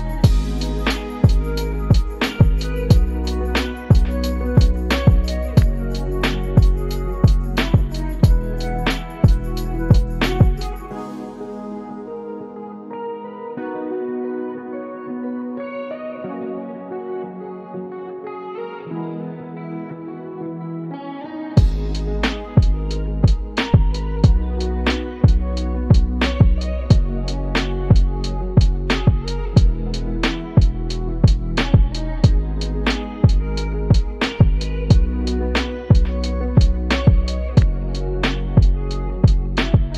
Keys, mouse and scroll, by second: 1.3 click, 1.5 typing, 3.9 click, 4.3 click, 6.9 shift+a, 11.5 click, 13.9 ctrl+a, 16.5 click, 19.7-22.6 drag, 26.8-30.6 drag, 31.7 click, 33.4 g, 37.4 click, 38.6-39.9 drag.